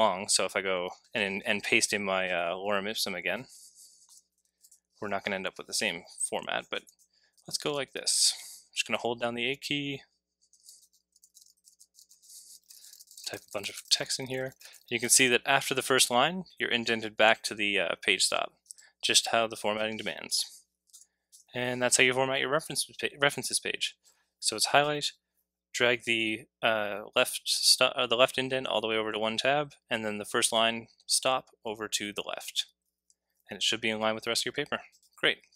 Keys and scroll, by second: 0.2 super+v, 4.1 BackSpace, 6.6-15.7 typing, 20.3 BackSpace, 20.9 BackSpace, 21.3 BackSpace.